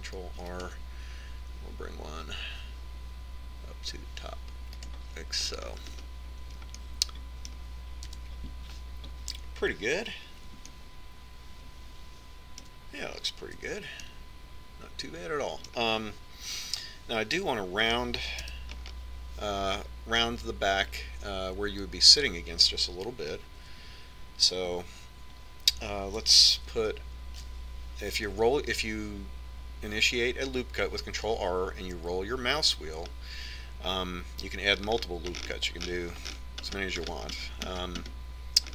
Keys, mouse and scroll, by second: 1.3 ctrl+r, 7.3-10.4 middle drag, 9.7 KP_1, 12.3 middle click, 13.2-14.3 middle drag, 15.3 Tab, 15.7-17.4 middle drag, 18.1 Tab, 20.1 KP_1, 25.3 Tab, 26.2 Tab, 28.4 ctrl+r.